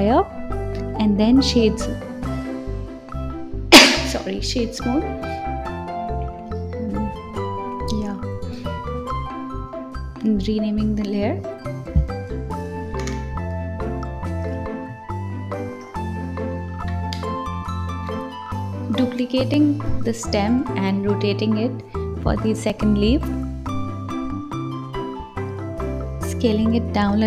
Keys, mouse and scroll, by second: 0.9 right click, 1.5-2.7 scroll up 6, 2.7 click, 4.4 KP_3, 5.4 click, 6.9 KP_1, 8.3 click, 8.5-11.5 drag, 11.7 click, 13.8 click, 14.4 shift+d, 15.7 r, 16.8 s, 17.6 g, 18.6 s, 19.5 click, 20.4 r, 21.4 click, 21.8-22.3 scroll down 2, 22.3 click, 23.2 g, 24.0 click, 24.6 click, 24.9-25.5 scroll down 1, 25.5 s, 26.8 click.